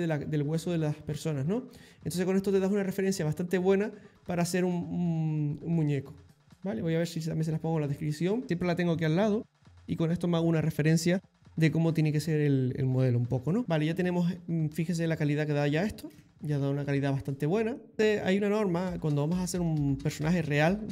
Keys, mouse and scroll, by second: 13.6 shift+middle click, 14.2 click, 14.9 click, 16.2 ctrl+z, 17.8 click.